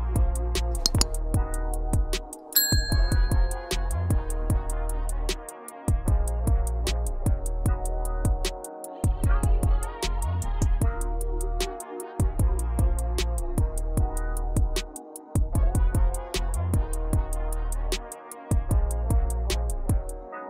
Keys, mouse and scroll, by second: 3.3 click, 4.4 KP_Decimal, 5.9-6.6 scroll down 4, 7.7 click, 8.2 shift+click, 8.8 shift+click, 10.1-11.6 shift+middle drag, 13.7 click, 16.2 r, 18.5 g, 19.9 s.